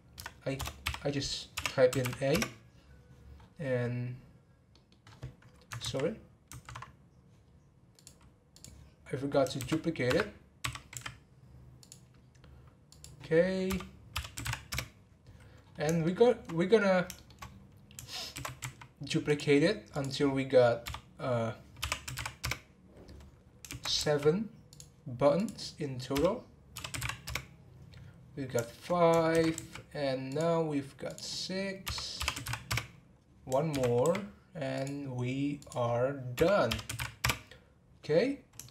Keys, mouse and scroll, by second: 3.4-4.7 scroll down 6, 4.7 middle click, 5.0-5.8 scroll up 2, 5.8 ctrl+z, 8.0-9.5 drag, 9.5 shift+d, 12.9-15.6 drag, 15.6 scroll down 4, 16.0 shift+middle click, 16.8 scroll up 1, 17.1 shift+middle click, 17.5-18.2 scroll down 2, 18.3 shift+d, 19.9-23.1 drag, 23.7 shift+d, 25.3-28.3 drag, 28.3 scroll down 3, 28.6 shift+middle click, 28.8-29.3 scroll up 1, 29.3 shift+d, 31.1-33.7 drag, 33.7 shift+d, 35.6-38.6 drag, 38.6-38.7 shift+middle drag.